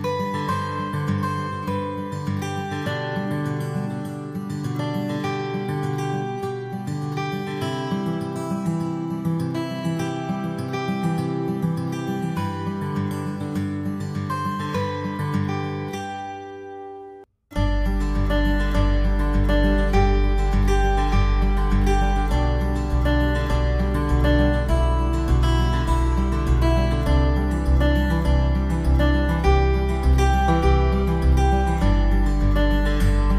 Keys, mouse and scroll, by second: 0.4 shift+right click, 1.2 j, 1.8 middle click, 2.7-3.2 scroll down 4, 3.2 middle click, 4.1 ctrl+s, 5.1-5.4 scroll down 2, 5.4 middle click, 6.3 KP_7, 7.0 scroll down 2, 7.4 shift+middle click, 7.9 z, 9.1 shift+middle click, 9.8 shift+middle click, 11.9 right click, 12.6 b, 18.0 b, 21.5 x, 22.7 middle click, 23.4 Tab, 24.3 z, 25.4-25.7 scroll down 2, 26.1 click, 29.6 click, 30.2 middle click.